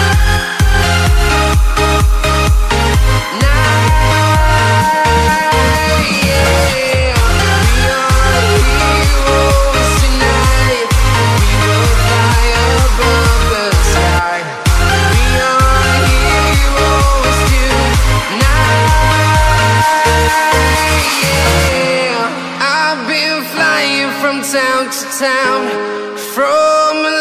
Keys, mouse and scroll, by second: 3.2 click, 11.7 click, 13.6-15.0 scroll up 1, 15.0 click, 15.2 right click, 16.7 click, 21.0 s, 22.2 click.